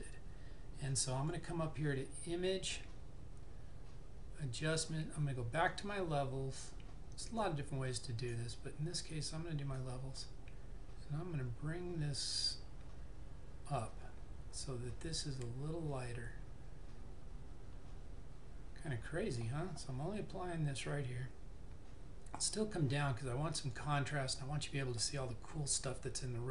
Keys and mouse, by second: 1.2 click, 5.9 click, 20.9 click.